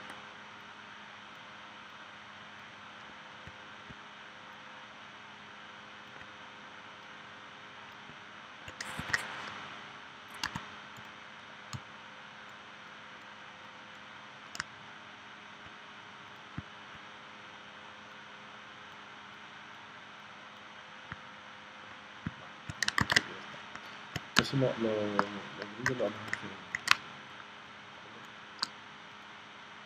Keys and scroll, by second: 10.4 a, 23.0 super+s, 24.4 space, 25.9 v, 26.9 space.